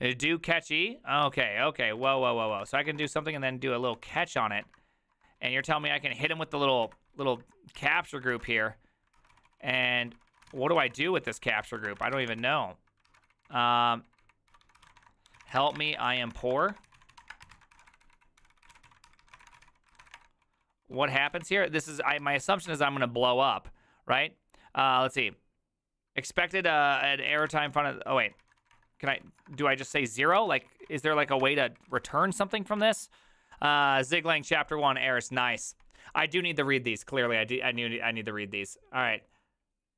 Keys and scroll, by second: 1.3 alt+{, 2.0-22.9 typing, 27.2 ctrl+a, 27.4-32.4 typing, 27.5 ctrl+c, 30.3 ctrl+c, 32.8 Return.